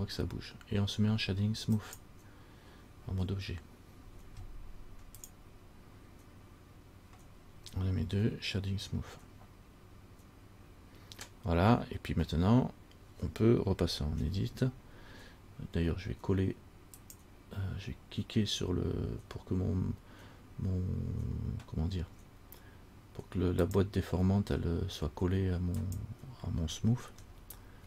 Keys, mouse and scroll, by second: 2.0 click, 12.4 scroll down 1, 14.4 Tab, 17.2 click, 23.9 click, 26.0 click, 27.5 shift+middle click, 27.5 shift+scroll up 1.